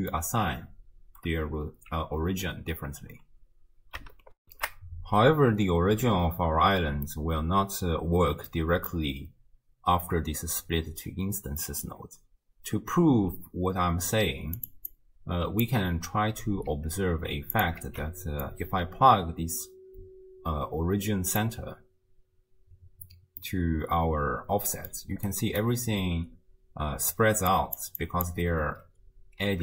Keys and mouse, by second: 4.4 ctrl+alt+shift+w, 4.6 ctrl+alt+shift+q, 8.5 click, 8.5 right click, 11.6 click, 11.6 right click, 14.6 click, 14.9 click, 17.1 ctrl+x, 17.6 click, 17.9 ctrl+x, 18.4-21.4 drag, 23.5-24.9 middle drag, 25.3 click, 25.3-29.6 typing, 27.5 click, 28.0 click.